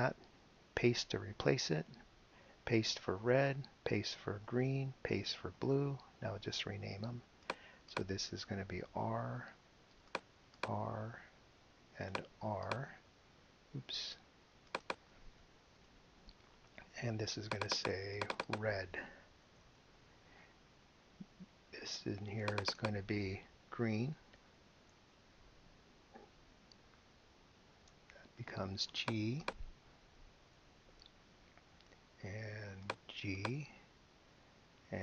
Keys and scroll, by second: 1.3 super+v, 3.1 super+v, 4.4 super+v, 9.0 r, 10.6 r, 12.7 r, 15.7 BackSpace, 19.2-20.3 typing, 24.0-25.9 typing, 30.4 g, 33.4 g.